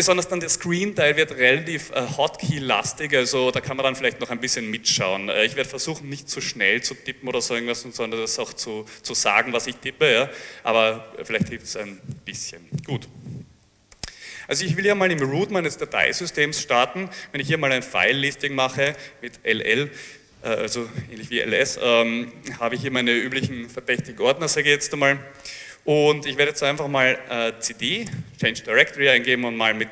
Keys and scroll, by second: 13.4-14.4 typing, 15.2 Return, 18.2 l, 18.9 Return, 27.1-28.1 typing.